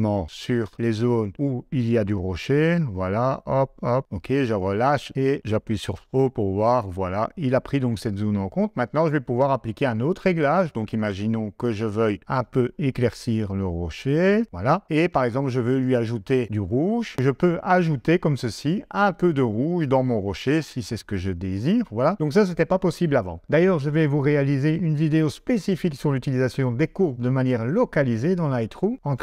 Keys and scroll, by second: 5.9 o.